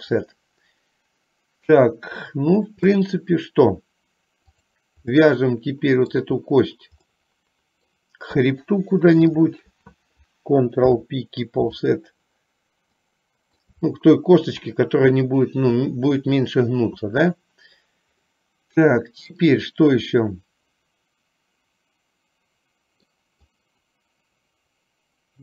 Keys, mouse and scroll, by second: 4.6 click, 5.4-6.4 middle drag, 7.4 middle click, 9.4 shift+click, 10.9 ctrl+p, 13.1 middle click, 14.1 shift+middle click, 18.5 middle click, 20.4-21.4 middle drag, 21.5-23.3 middle drag, 23.6-25.4 middle drag.